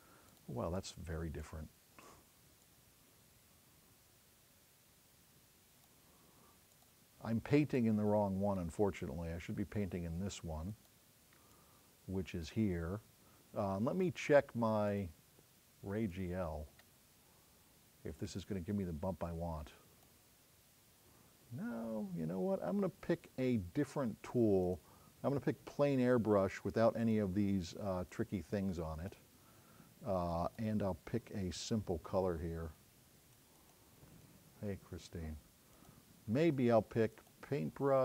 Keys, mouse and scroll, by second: 27.1 click, 28.1-29.2 drag, 30.4 click, 37.2-38.0 drag.